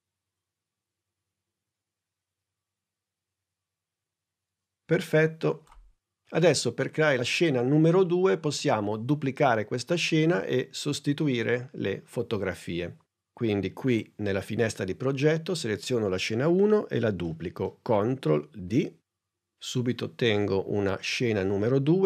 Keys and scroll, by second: 18.5 super+d.